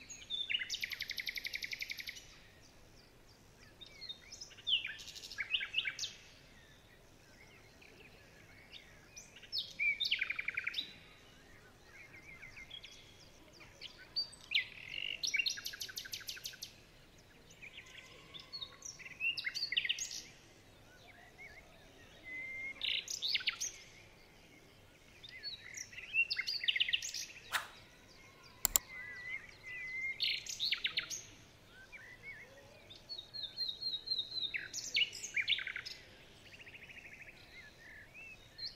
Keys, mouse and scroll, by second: 0.0 shift+click, 0.1 shift+double click, 0.4 shift+click, 0.5 shift+double click, 0.8 shift+click, 0.9 alt+scroll down 2, 1.3 alt+scroll up 2, 1.3 shift+click, 1.4 shift+click, 2.5 alt+scroll down 3, 2.6 alt+scroll up 4, 2.8 shift+click, 2.9 shift+click, 3.3 alt+scroll down 1, 4.4 ctrl+z, 4.7 shift+click, 5.4 shift+click, 6.0-6.7 alt+scroll down 7, 6.7-7.0 alt+scroll up 3, 8.8 alt+scroll down 3, 9.0-9.9 alt+scroll up 5, 11.1 ctrl+z, 11.9 alt+scroll down 4, 12.0-12.9 alt+scroll up 1, 13.0-14.0 alt+scroll up 3, 16.5 alt+scroll up 16, 17.0 shift+click, 17.1 shift+click, 17.5 alt+scroll down 18, 17.8 alt+scroll up 4, 19.0-19.4 alt+scroll down 3, 19.6-20.1 alt+scroll up 3, 20.6-21.1 alt+scroll down 5, 21.1-21.5 alt+scroll up 2, 22.5 alt+scroll down 1, 22.7 alt+scroll up 2, 22.9-23.3 alt+scroll down 3, 23.8 ctrl+z, 24.1 ctrl+z, 24.6 ctrl+z, 25.8 alt+scroll down 1, 25.9 alt+scroll up 1, 26.4 ctrl+z, 26.5 ctrl+z, 26.7 ctrl+z, 29.9 alt+scroll down 2, 30.0-30.6 alt+scroll up 3, 32.5 alt+scroll up 4, 33.0 alt+scroll down 2, 33.2-33.6 alt+scroll up 3, 34.1 alt+scroll up 5, 34.1 alt+scroll down 6, 35.9 alt+scroll down 1, 37.9 ctrl+shift+[.